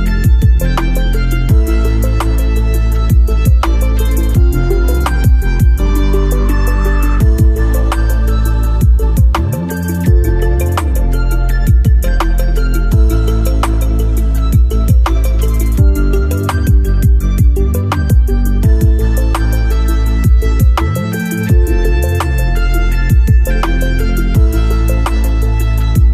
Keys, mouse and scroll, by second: 1.6 click, 4.2-8.1 right drag, 8.5-9.0 scroll down 1, 9.5-10.0 scroll up 1, 10.4 alt+middle click, 11.4-11.8 scroll up 2, 12.0 alt+middle click, 14.2 click, 17.1-20.5 drag, 24.2-26.1 drag.